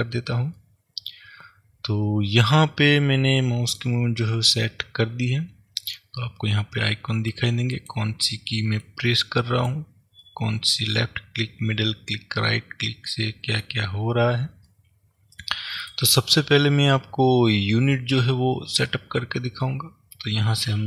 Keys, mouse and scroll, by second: 0.0 click, 0.7-7.9 middle drag, 7.9 click, 8.9 click, 9.3-16.0 middle drag, 14.0-14.7 scroll up 2, 16.0 click.